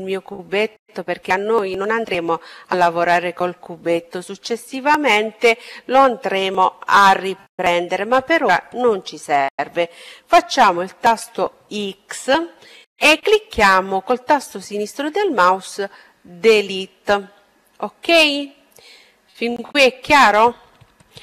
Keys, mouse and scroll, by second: 9.4 x.